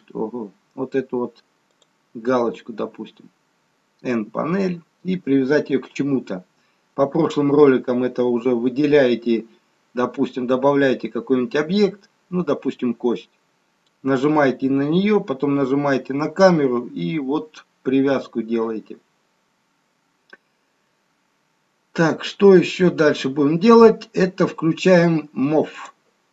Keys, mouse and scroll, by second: 1.9 click, 4.2 n, 26.0 click.